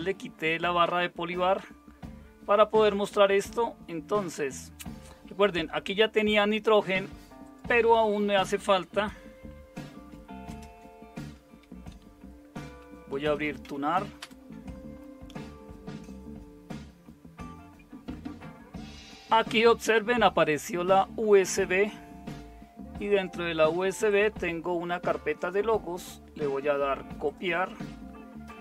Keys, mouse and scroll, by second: 10.5 super+space, 12.9-14.1 typing, 14.2 Return.